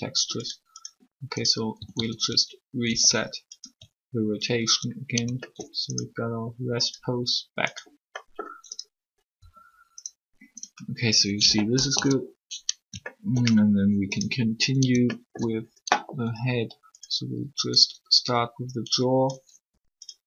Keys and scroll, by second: 1.7 typing, 2.8 alt+r, 9.4 r, 11.9 3, 19.5 r.